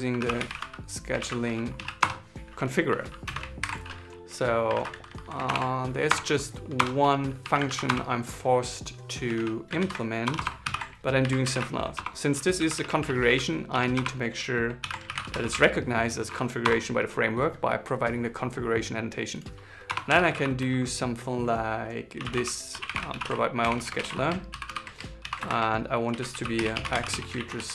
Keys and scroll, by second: 0.9 shift+c, 3.3 alt+8, 4.5 super+Left, 5.2 alt+Return, 7.4 super+Left, 9.5 super+Right, 10.3 alt+l, 10.9 shift+b, 14.5 alt+l, 15.8 shift+c, 24.0-25.8 typing, 27.1 shift+s.